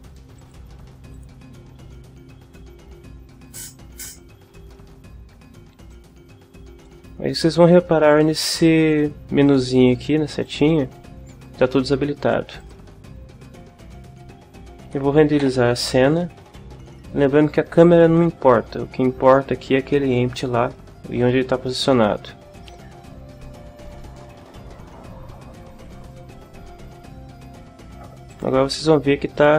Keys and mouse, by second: 0.4 click, 1.2 click, 5.9-7.0 drag, 10.4 click, 12.6 click, 15.4 F12, 28.3 click.